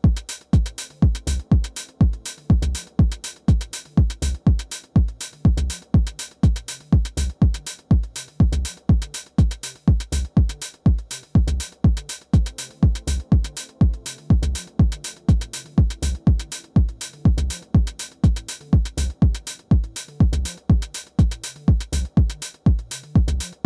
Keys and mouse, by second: 2.6-6.1 middle drag, 7.5-11.0 drag, 11.0 middle click, 11.4 alt+w, 12.2 alt+w, 15.4-22.1 drag, 15.6-16.6 middle drag, 19.9-21.3 middle drag, 22.1 middle click, 22.4-23.6 drag.